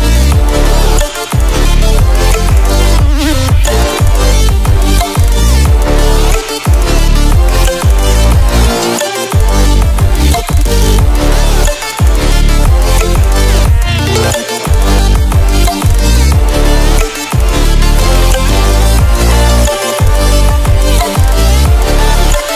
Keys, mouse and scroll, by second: 0.6 ctrl+alt+scroll down 1, 2.6 ctrl+alt+scroll down 1, 2.9-3.3 ctrl+alt+scroll up 1, 5.1 ctrl+alt+scroll up 1, 6.2-6.9 ctrl+alt+scroll down 1, 6.9 ctrl+alt+scroll up 1, 8.4 ctrl+alt+scroll up 1, 9.7 click, 11.3 click, 12.5-15.0 drag, 16.2-17.2 ctrl+alt+scroll up 2, 17.4-18.7 drag.